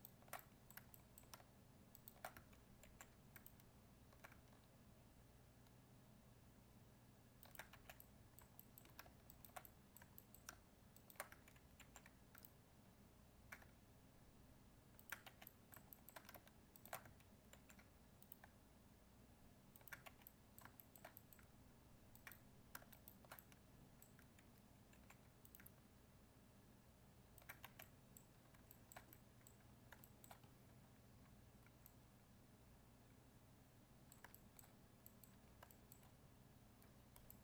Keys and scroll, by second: 2.8 ctrl+e, 11.8 ctrl+e, 17.5 ctrl+e, 24.9 ctrl+e.